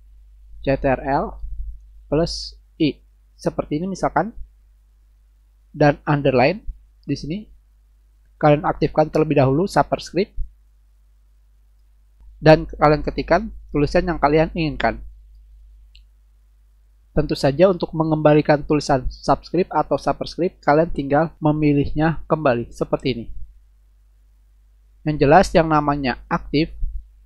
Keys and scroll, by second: 0.2-2.8 typing, 14.8-16.7 typing.